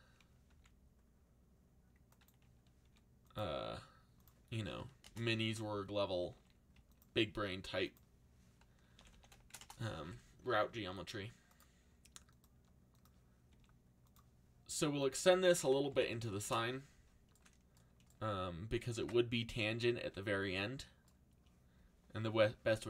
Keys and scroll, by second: 0.5 z, 2.8 r, 4.4-6.8 typing, 8.6-9.5 typing, 9.6 Return, 10.7 r, 13.5 r, 15.6-16.7 typing, 19.0 alt+a.